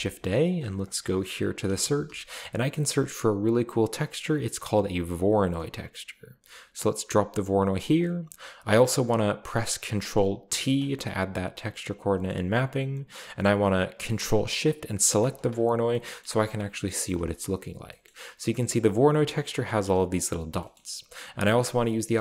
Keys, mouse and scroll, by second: 0.5 click, 1.7-2.1 typing, 5.2 click, 8.0 click, 10.6 ctrl+t, 12.3 middle click, 15.2 ctrl+shift+click, 15.9 shift+middle click, 16.9 shift+middle click, 17.2 middle click, 18.1-18.7 shift+middle drag, 20.8-22.2 middle drag.